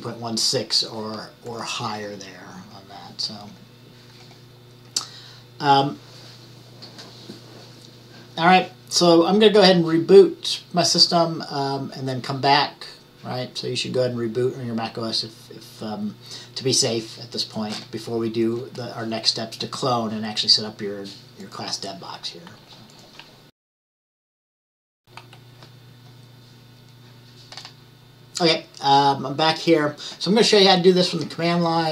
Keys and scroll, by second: 25.0 q.